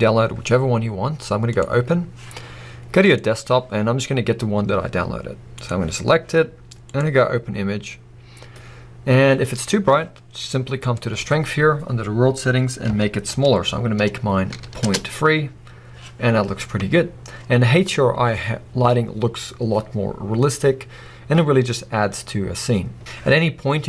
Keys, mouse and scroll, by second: 8.1 click, 10.8 click, 15.0 Return, 16.3 scroll up 1, 17.2 scroll down 1.